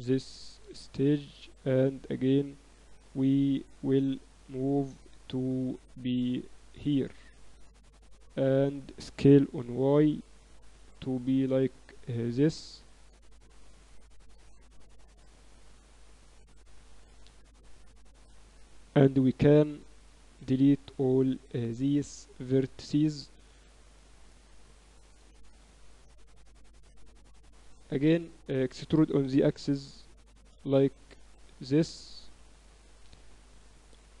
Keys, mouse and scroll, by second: 2.1-3.9 drag, 3.9 middle click, 5.9-7.1 middle drag, 7.1-8.9 drag, 9.2 s, 12.2 s, 13.6-15.4 drag, 16.6 Tab, 17.2 a, 18.0 a, 18.3 a, 18.8 b, 20.4 x, 22.2 a, 22.9 KP_3, 23.6 z, 24.3 z, 27.5-30.2 middle drag, 29.2 e.